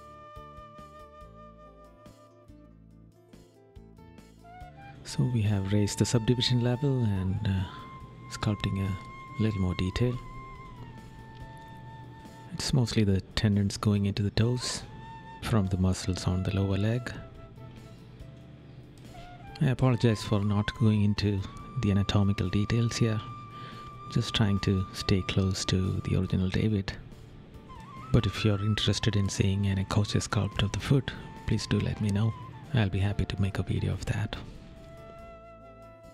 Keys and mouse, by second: 0.0 right click, 1.5 right click, 2.7 right click, 9.1 right click, 10.3 right click, 14.3 right click, 15.1 right click, 16.1 right click, 17.3 right click, 17.9 right click, 18.9 right click, 20.0 right click, 22.7 right click, 23.9 right click, 24.7 right click, 25.9 right click, 26.6 right click, 28.7 right click, 31.8 right click, 33.8 right click, 34.6 right click.